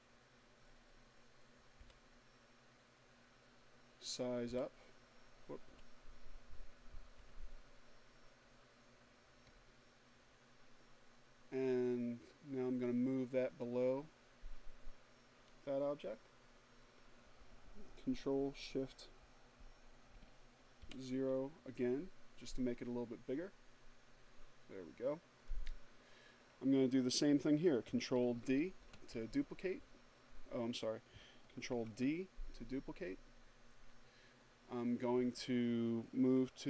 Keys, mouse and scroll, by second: 2.4 =, 3.6 -, 5.2 0, 11.6 click, 18.7 ctrl+shift+o, 23.5 click, 26.3 ctrl+s, 29.7 ctrl+d, 34.6 d.